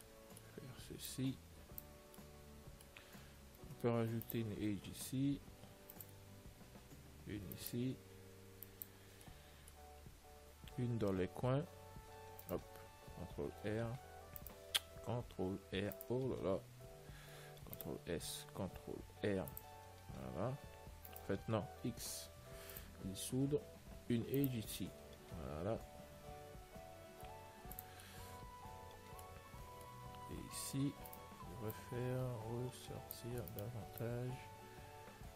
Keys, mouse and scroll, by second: 0.3-2.1 middle drag, 1.4 click, 2.9-4.4 middle drag, 4.3 ctrl+r, 7.6 ctrl+r, 9.9-14.0 middle drag, 11.8 r, 14.0 r, 17.2 r, 17.2 a, 17.9 ctrl+s, 19.2 ctrl+r, 22.2 x, 24.3 ctrl+r, 28.3-32.0 middle drag, 31.4-33.2 right drag, 32.0 click, 33.8-35.3 right drag, 34.3 click.